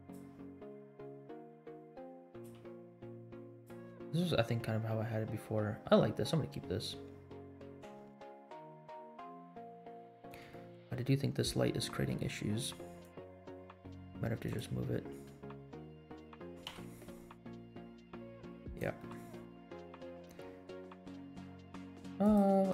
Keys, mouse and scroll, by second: 0.5 r, 2.4 g, 4.8-5.9 scroll up 5, 6.2 scroll down 2, 7.5 scroll up 2, 8.1 space, 9.0 space, 9.6 scroll up 2, 9.8-10.2 middle drag, 10.5 shift+middle drag, 10.9 scroll up 1, 12.0-12.3 scroll down 7, 13.1 click, 13.5 middle click, 14.4 click, 15.3 middle click, 15.8 middle click, 16.6 KP_Decimal, 17.1 scroll down 2, 17.4 middle click, 17.8 g, 19.0 middle click, 19.1 scroll down 2, 19.4 middle click, 19.8 g.